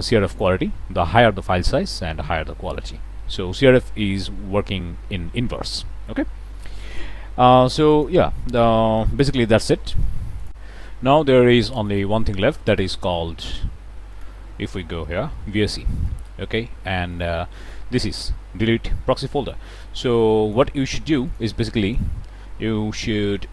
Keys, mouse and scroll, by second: 7.8 click, 8.6 2, 8.7 KP_0, 8.9 Return, 10.4 click, 11.8 click, 12.6 click, 14.0 click, 14.9 v, 15.0 s, 15.2 e, 15.9 click, 17.0 click, 20.2 click, 21.2 click, 21.8 ctrl+click.